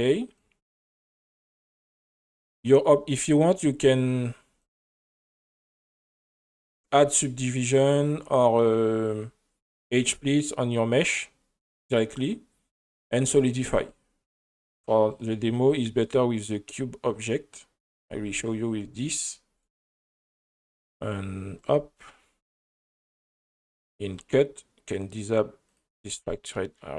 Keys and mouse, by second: 0.3 click, 2.6 click, 3.1 click, 4.6 click, 10.4 click, 11.0 click, 13.8 click, 15.1 click, 17.9 click, 18.4 right click, 21.6 click, 24.1 click, 25.7 click, 26.5 middle click.